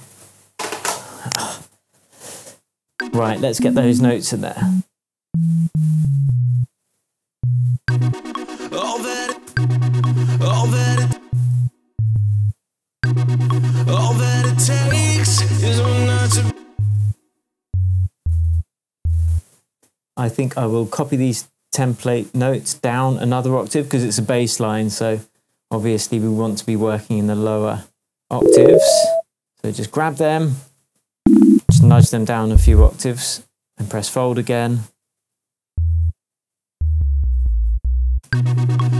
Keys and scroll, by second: 2.9 space, 7.8 space, 9.2 space, 11.0 space, 11.5 alt+space, 12.1 alt+space, 12.9 alt+space, 13.9 space, 16.4 space, 17.6 Down, 31.1 shift+Down, 38.2 alt+space.